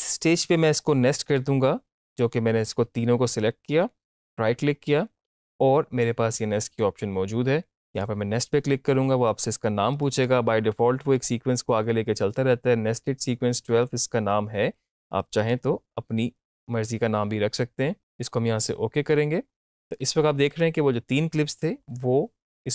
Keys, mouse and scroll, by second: 0.7-3.6 drag, 4.0 right click, 7.9 click, 15.2 click, 18.2 click, 20.5 click.